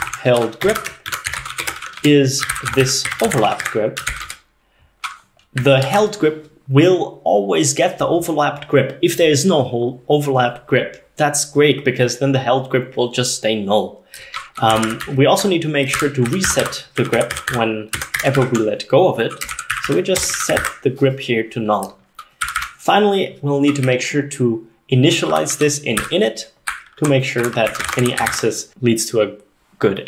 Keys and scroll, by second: 0.0-4.6 typing, 5.9 ctrl+s, 14.5-20.8 typing, 22.5 y, 22.6 y, 23.9-28.5 typing.